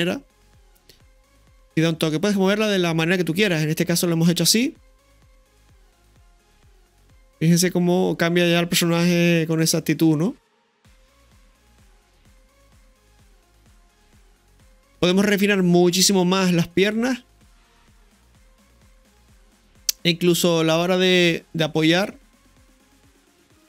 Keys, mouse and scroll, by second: 0.6 click, 2.2-2.5 middle drag, 4.3-4.7 middle drag, 9.5-14.5 middle drag, 20.1-20.9 middle drag.